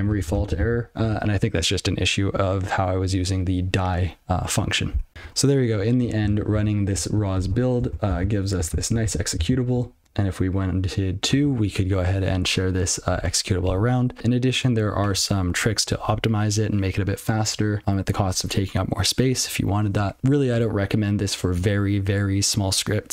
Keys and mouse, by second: 1.5 ctrl+g, 5.1 alt+shift+., 8.1 ctrl+k, 10.0 ctrl+n.